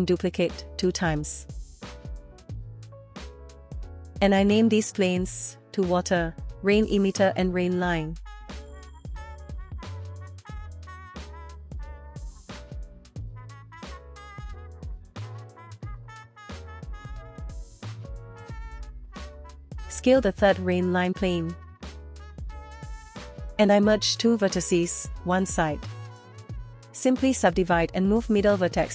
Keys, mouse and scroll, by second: 0.0 KP_Decimal, 0.9-1.3 shift+middle drag, 1.8 scroll up 1, 2.3 middle click, 3.5 click, 5.9 click, 6.1 F2, 8.2 click, 8.8 shift+d, 9.7 click, 9.8 F2, 10.0 BackSpace, 12.1 scroll down 1, 12.3 shift+middle click, 12.6 shift+middle click, 12.8 shift+middle click, 13.0 drag, 13.2 shift+d, 13.9 shift+middle drag, 14.2 click, 14.5 F2, 14.9 BackSpace, 16.7 t, 17.2 click, 17.3 shift+middle click, 17.4 click, 18.3 s, 23.7 middle click, 24.0 scroll up 1, 24.2 shift+middle click, 24.5-24.8 scroll up 1, 24.8 middle click, 25.2 Tab, 25.4 click, 25.9 m, 26.4 shift+middle click, 26.5 scroll up 2, 27.9-28.9 right drag.